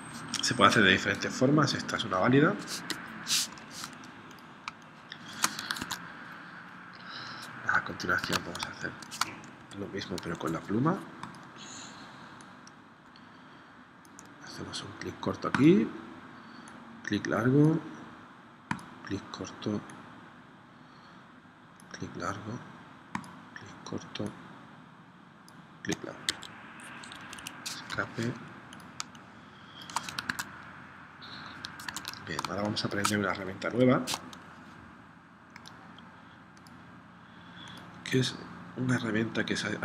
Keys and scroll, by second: 2.9 0, 3.6 v, 4.8 space, 5.8 super+Tab, 8.2 super+Tab, 8.6 space, 9.7 p, 26.3 0, 27.0 Escape, 28.0 v, 29.1 space, 30.3 super+Tab, 32.0 super+Tab, 32.5 space, 33.7 p.